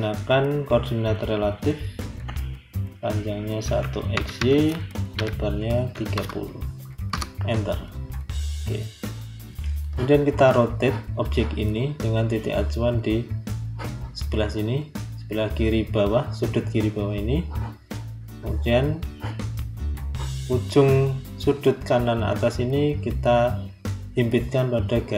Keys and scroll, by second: 7.0 Return.